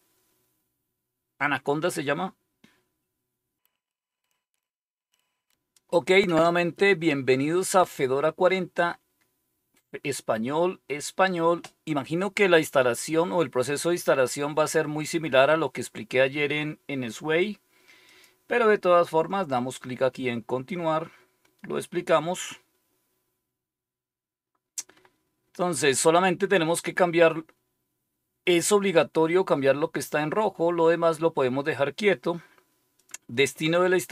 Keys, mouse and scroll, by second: 18.0 click, 32.9 click.